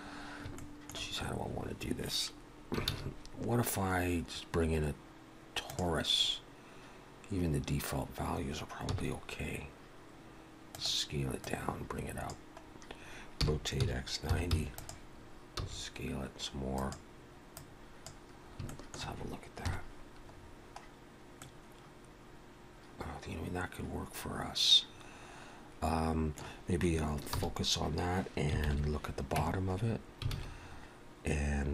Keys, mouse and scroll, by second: 0.5 shift+middle click, 1.3 scroll up 1, 2.9 shift+a, 8.9 s, 11.5 click, 12.6 scroll up 1, 13.4 r, 15.6 s, 17.6 click, 18.4 scroll up 2, 18.7 shift+middle click, 19.7 KP_Decimal, 20.4-21.4 scroll down 2, 21.4 middle click, 27.2 shift+h, 28.6 ctrl+KP_7, 29.4 Tab, 29.8-31.7 scroll up 4, 30.3 alt+a.